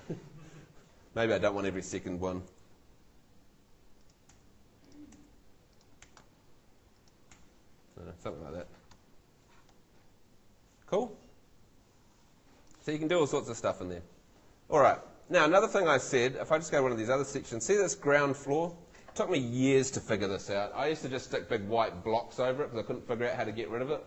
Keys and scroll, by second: 2.5 BackSpace, 4.3 BackSpace, 7.4 BackSpace.